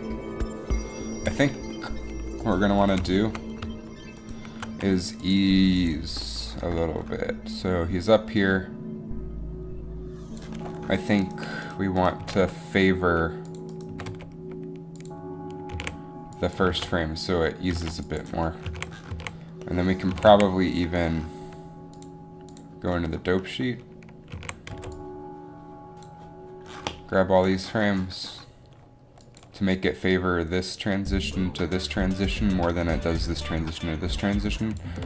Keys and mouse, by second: 2.9-4.3 drag, 11.4 right click, 12.3 g, 12.5 g, 14.0 g, 14.1 g, 15.9 a, 16.8 alt+a, 18.0 alt+a, 18.9 a, 19.3 a, 20.3 a, 20.4 a, 22.8 alt+a, 24.6 a, 24.8 b, 28.9 alt+a, 29.4-31.1 drag.